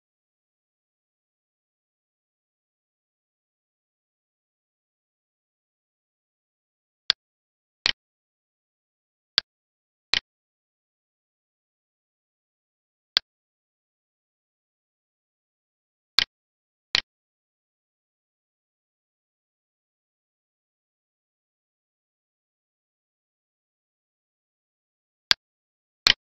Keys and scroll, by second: 20.6 alt+e.